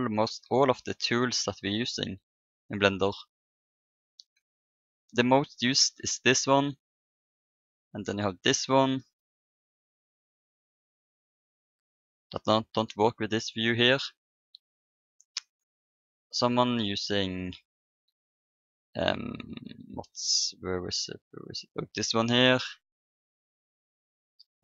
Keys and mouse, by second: 7.3-9.2 drag, 9.9-13.6 drag, 12.3-13.7 middle drag, 15.4-19.3 drag, 22.6-24.0 middle drag, 24.0-24.6 drag.